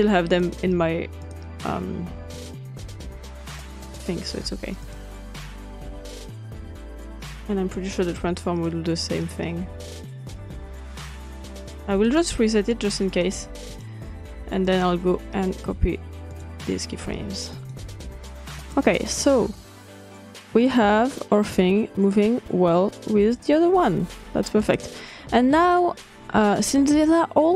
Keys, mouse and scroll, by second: 0.0 click, 0.5 drag, 1.1 click, 1.4 click, 2.5 click, 3.2 drag, 3.5 click, 3.7-5.0 drag, 5.3 click, 5.8 click, 6.7 click, 7.3 click, 8.1 click, 8.9 click, 9.1 click, 9.7 click, 10.2 click, 11.2 click, 11.6-11.9 drag, 12.0 click, 12.8-14.0 drag, 14.4-14.8 drag, 15.3 click, 15.7-16.1 drag, 16.2-18.1 drag, 18.6-20.2 drag, 20.6 click, 24.8-25.6 drag, 25.8-27.2 drag.